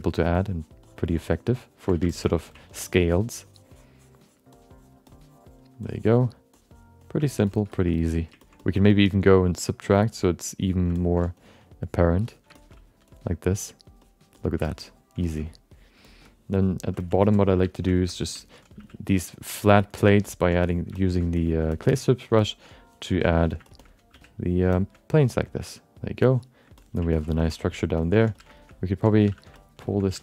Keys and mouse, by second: 0.3 ctrl+click, 0.8 ctrl+click, 1.2 ctrl+click, 1.6 ctrl+click, 2.1 alt+shift+middle click, 2.2 middle click, 2.7 ctrl+click, 4.0 ctrl+click, 4.6 ctrl+click, 5.1 ctrl+click, 5.8 ctrl+click, 6.5 ctrl+click, 7.0 ctrl+click, 7.4 middle click, 7.7 alt+shift+middle click, 7.9 middle click, 8.4 ctrl+alt+middle click, 8.6 alt+middle click, 8.9 ctrl+alt+middle click, 9.4 click, 9.9 f, 10.1 click, 10.6 click, 10.9 alt+shift+middle click, 11.8 click, 12.2 click, 12.5 shift+middle click, 12.7 middle click, 13.0 click, 13.5 click, 14.0 click, 14.3 click, 14.6 ctrl+middle click, 14.8 alt+middle click, 15.4 alt+middle click, 16.0 shift+middle click, 16.3 alt+middle click, 17.0 ctrl+alt+middle click, 17.5 1, 17.9 alt+shift+middle click, 18.1 alt+middle click, 18.3 ctrl+alt+middle click, 18.7 f, 19.4 click, 19.9 click, 20.2 shift+middle click, 20.6 click, 20.9 shift+middle click, 21.3 click, 21.7 shift+middle click, 22.1 click, 22.4 shift+middle click, 22.8 click, 23.3 click, 23.6 alt+shift+middle click, 24.1 f, 24.4 click, 24.7 shift+middle click, 25.1 click, 25.6 click, 26.3 click, 26.8 middle click, 27.1 ctrl+middle click, 27.4 alt+shift+middle click, 27.6 alt+middle click, 28.0 ctrl+alt+middle click, 28.3-30.2 typing, 28.5 alt+shift+middle click, 28.7 alt+middle click, 29.5 middle click, 29.8 shift+middle click.